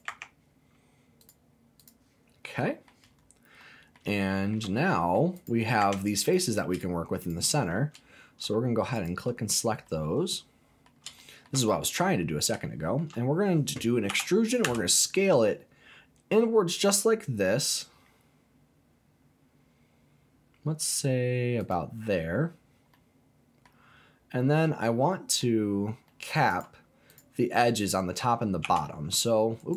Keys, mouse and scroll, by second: 0.1 Tab, 1.2 click, 2.2-2.5 scroll down 2, 2.5 middle click, 3.1 scroll up 2, 3.6 middle click, 4.2 shift+middle click, 4.8 middle click, 5.3 click, 5.8 Tab, 6.2 click, 6.7 shift+click, 7.2 shift+click, 8.9 alt+click, 9.8-10.9 middle drag, 11.2 shift+middle click, 11.5 shift+scroll down 2, 11.8 middle click, 12.1 scroll down 1, 12.2 scroll up 2, 12.6 shift+middle click, 14.1 e, 14.6 s, 21.6 click, 22.3-22.9 scroll down 2, 22.9 middle click, 23.8-24.5 scroll up 3, 24.8 middle click, 25.6-26.0 scroll up 1, 26.0 middle click, 26.5 click, 27.1 click, 27.2-28.6 scroll up 1, 28.6 e, 29.6 right click.